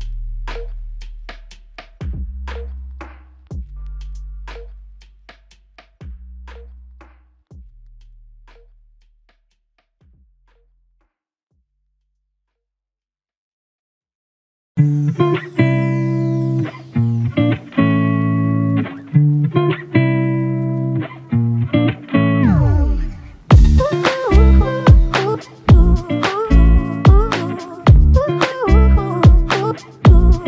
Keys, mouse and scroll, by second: 20.6 ctrl+click, 22.6 ctrl+click, 25.6 ctrl+click, 29.6 shift+click.